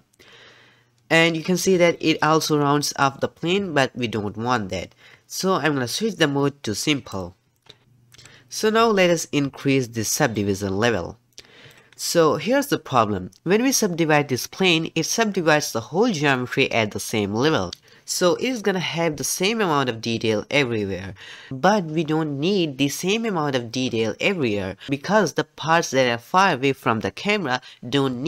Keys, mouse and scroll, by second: 7.2 click, 10.3-13.4 drag.